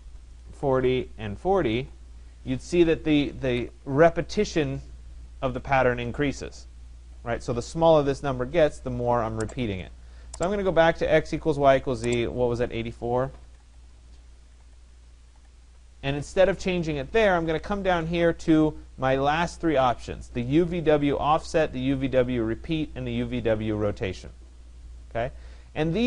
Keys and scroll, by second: 0.0-1.6 typing, 12.8-15.1 typing, 13.7 Tab, 15.4 Tab.